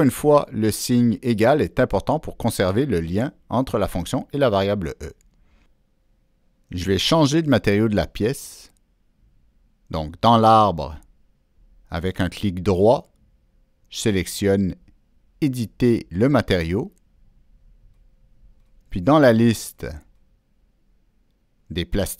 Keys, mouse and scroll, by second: 0.0 Return, 3.4 click, 4.6 click, 13.3 right click, 16.0 click, 16.9 click, 16.9 right click, 17.5 click, 18.6-19.6 drag, 21.0 click, 21.6 click.